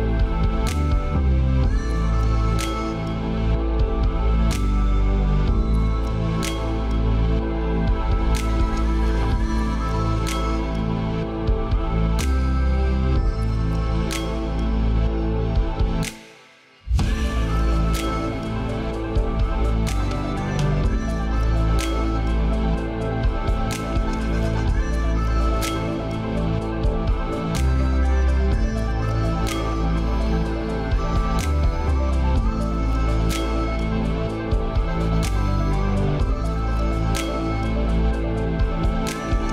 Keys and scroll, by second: 12.4 ctrl+a, 19.2 ctrl+z, 35.9 ctrl+z.